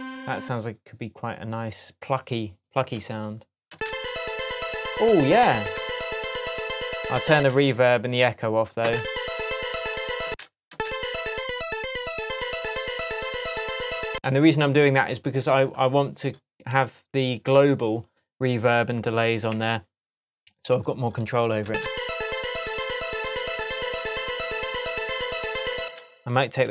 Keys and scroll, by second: 3.7 space, 7.3 space, 8.8 space, 10.2 space, 14.1 space, 17.1 Tab, 19.5 Tab, 21.6 space, 25.8 space, 26.5 super+space, 26.6 super+a.